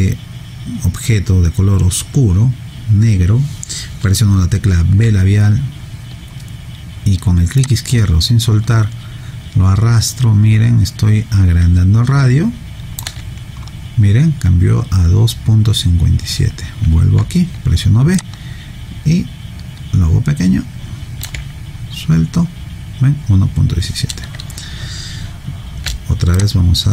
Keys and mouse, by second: 5.0 b, 7.6 click, 13.0 b, 17.2 b, 18.2 click, 26.0 b, 26.3 click.